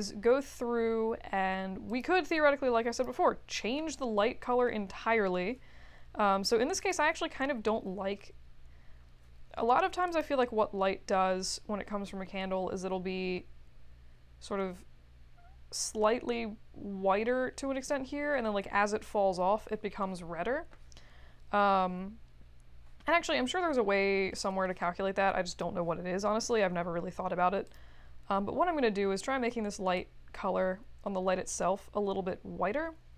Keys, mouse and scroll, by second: 1.8 click, 2.9 click, 4.4 middle click, 6.8 click, 10.1 click, 23.2-24.1 scroll down 2, 24.1-24.6 scroll up 4, 25.5 click, 27.6 click, 30.0-33.1 drag.